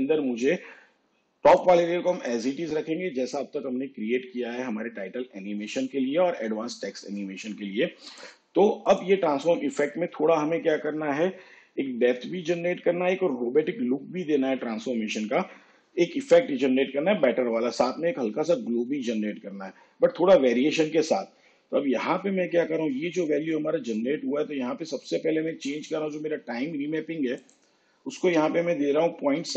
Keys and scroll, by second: 28.4 ., 29.4 7.